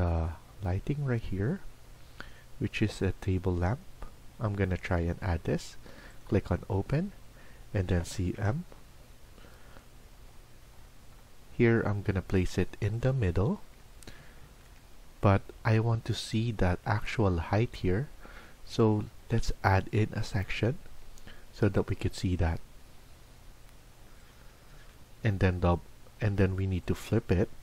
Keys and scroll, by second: 7.8-8.2 typing, 16.3 Escape, 24.7 Escape, 24.8 Escape, 25.0 Escape.